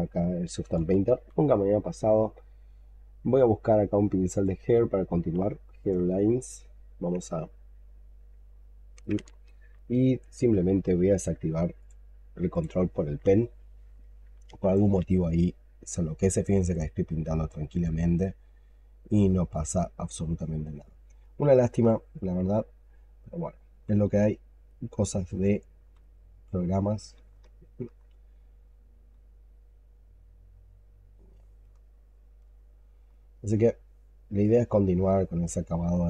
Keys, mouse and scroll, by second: 0.6-1.9 typing, 7.2 ctrl+right click, 17.5 double click, 19.0 double click, 21.1 alt+click, 23.6 x, 25.0 double click, 25.7 x, 27.3 alt+click, 31.5 alt+click, 33.0 alt+click, 33.6 alt+right click, 34.9 alt+middle click, 35.7 alt+click.